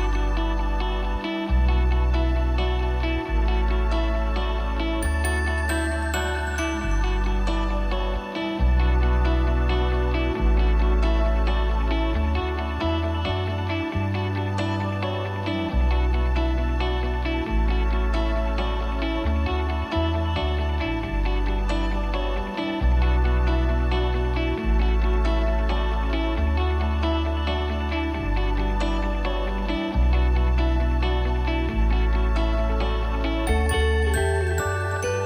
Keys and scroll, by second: 3.7 ctrl+0, 16.7 ctrl+j, 19.9 ctrl+j.